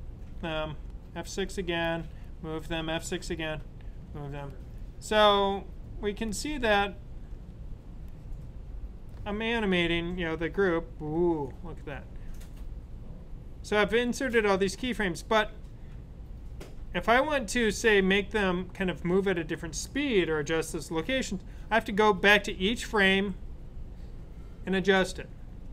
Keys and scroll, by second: 2.6 F6, 4.0 F6, 5.4 F6, 5.6 typing, 7.0-7.7 typing.